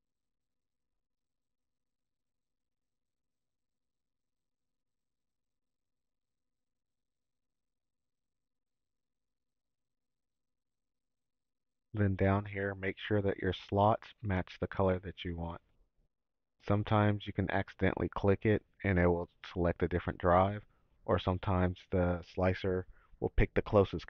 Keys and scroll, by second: 0.0-2.4 typing, 3.8 y, 5.0 shift+-, 6.4-9.0 typing.